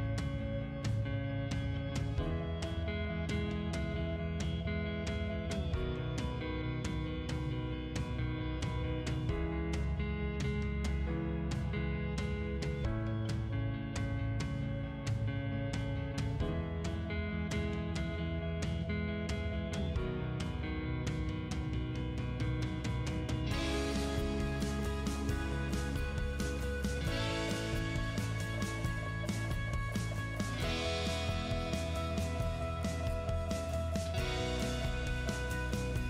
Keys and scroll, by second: 0.2 6, 0.3 Return, 2.9 Escape, 5.1 Delete, 6.4 t, 6.8 space, 10.3 Escape, 12.0 p, 12.4 space, 14.8 space, 17.6 space, 19.2 t, 19.6 space, 22.7 Escape, 23.6 Delete, 26.8 c, 28.6 space, 33.6 space.